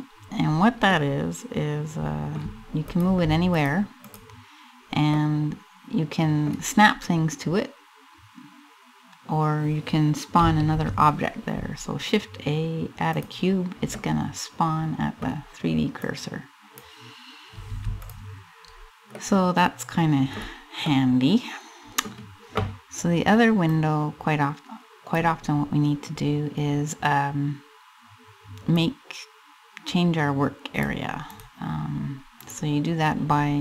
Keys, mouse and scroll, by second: 0.1-0.6 scroll down 3, 0.6 middle click, 1.7 middle click, 2.6 click, 3.2 click, 3.8 click, 4.7 middle click, 6.5 scroll up 2, 10.3 shift+a, 13.6 middle click, 14.3 middle click, 15.7 click, 17.3 x, 18.3-18.8 scroll up 2, 18.8 middle click, 20.0-20.3 scroll down 3, 20.5 middle click, 23.3 click, 28.3 click, 30.8 right click, 31.9 right click.